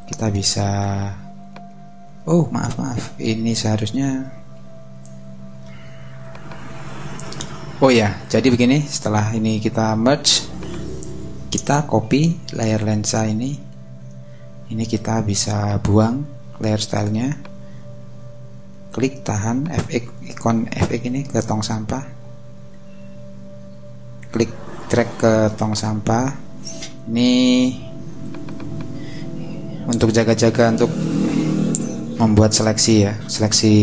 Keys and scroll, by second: 2.0 shift+super+z, 2.7 super+z, 4.7 ↻, 13.7 super+j.